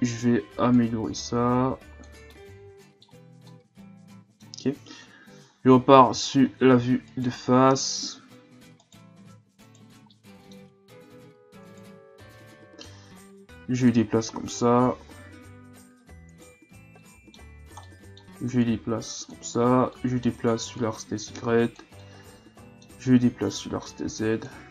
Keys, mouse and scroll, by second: 0.7-2.3 drag, 2.3-5.0 middle drag, 5.0 KP_1, 5.8-7.1 ctrl+scroll up 4, 7.1 alt+right click, 7.8 scroll up 1, 8.8 alt+right click, 9.6 alt+right click, 10.1-11.6 middle drag, 11.6 alt+right click, 12.5-14.5 drag, 14.5 KP_3, 16.3 alt+right click, 17.0-18.7 middle drag, 18.7-20.0 drag, 20.0 middle click, 20.8-22.1 drag, 22.1-23.5 middle drag, 23.5-24.7 drag.